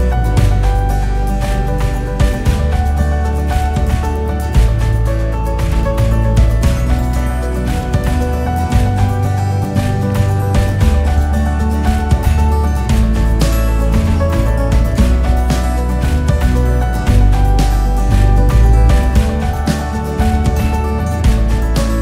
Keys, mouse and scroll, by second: 0.8 scroll up 4, 1.3 KP_6, 1.7 scroll down 1, 2.0 scroll up 1, 2.3 scroll down 3, 4.3 shift+a, 5.4 s, 8.9 s, 10.7 KP_1, 12.0 g, 17.1 click, 18.0 KP_8, 18.4 click, 19.8 click, 20.8 click, 21.6 KP_1.